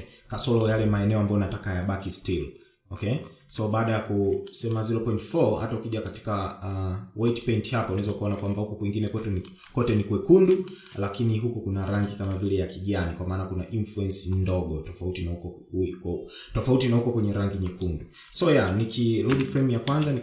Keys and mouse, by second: 0.2 shift+middle click, 3.3 Tab, 4.2 shift+middle click, 5.6-7.2 drag, 7.8 shift+middle click, 9.3 shift+middle click, 10.5 shift+middle click, 11.8 shift+middle click, 14.1-17.6 drag, 18.3 shift+middle click, 19.1 shift+Left, 19.6 space.